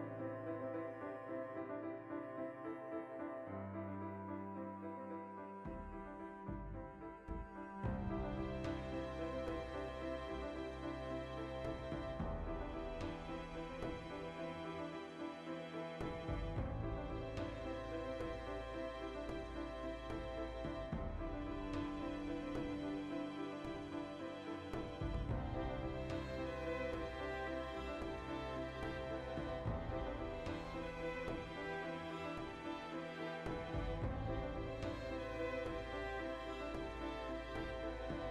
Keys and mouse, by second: 0.1 right click, 0.2-4.4 middle drag, 1.4 ctrl+r, 1.9 click, 2.0 Tab, 2.4 click, 4.0 r, 4.4 right click, 4.5-5.4 ctrl+middle drag, 5.4 right drag, 5.6 alt+q, 5.8-6.8 ctrl+shift+middle drag, 6.4 r, 6.8 right click, 6.9-8.7 middle drag, 7.4 r, 8.7 right click, 8.8-10.9 shift+middle drag, 9.6 r, 10.9 right click, 11.0-12.8 middle drag, 11.7 r, 12.8 right click, 12.9 middle click, 13.6 right click, 13.7-15.3 shift+middle drag, 15.7 click, 16.5 right click, 17.0 click, 18.0 alt+h, 18.4 right drag, 18.5 shift+middle drag, 18.7 right click, 18.8-20.9 middle drag, 20.9 right drag, 21.1-22.0 shift+middle drag, 22.0-23.4 right drag, 23.4 Tab, 23.6 shift+middle click, 24.0 3, 24.3 right click, 24.4 middle click, 24.8-26.1 ctrl+right drag, 26.2 middle click, 26.8 shift+right click, 27.2 ctrl+right click, 27.4-31.4 middle drag, 28.3 o, 29.1 alt+q, 30.0 g, 31.4 click, 31.5-36.4 middle drag, 33.2 ctrl+z, 34.3 alt+q, 35.1 z, 35.7 g, 36.4 click, 36.5 z, 36.6-38.3 middle drag.